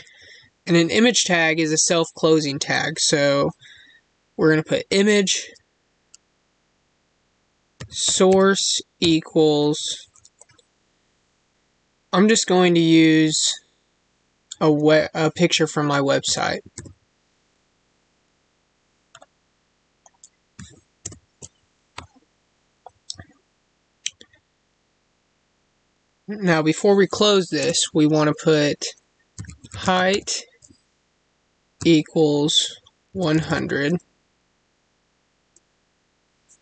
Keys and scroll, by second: 16.7 ctrl+v, 21.0 ctrl+v, 27.6 space.